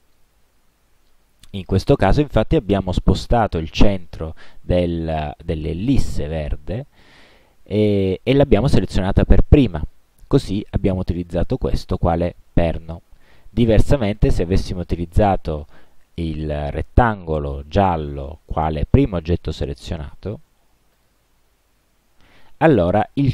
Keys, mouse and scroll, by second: 0.1 ctrl+z, 13.3 click, 14.3 click, 15.1 click, 21.0 shift+click.